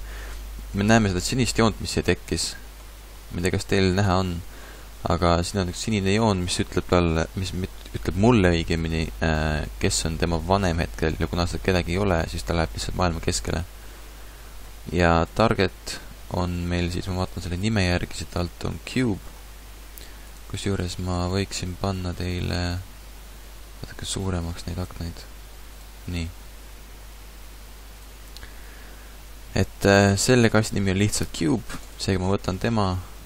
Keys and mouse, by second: 15.1-17.0 drag, 17.0 middle click, 17.5-22.1 drag, 27.1-29.0 drag, 31.8-33.2 drag.